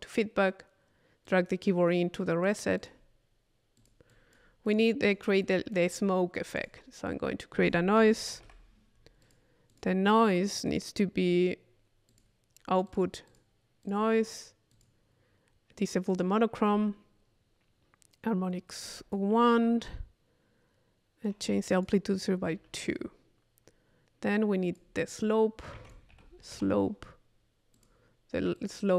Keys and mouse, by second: 1.3-2.6 drag, 3.8-5.8 drag, 4.7-6.0 right drag, 6.0-7.9 drag, 7.6 Tab, 8.4 i, 9.2-10.2 drag, 12.1 click, 12.9-14.2 drag, 14.7 click, 16.1 click, 18.9 click, 21.3 click, 22.8 click, 24.4-26.2 drag, 25.8 Tab, 27.8 click, 28.6 click.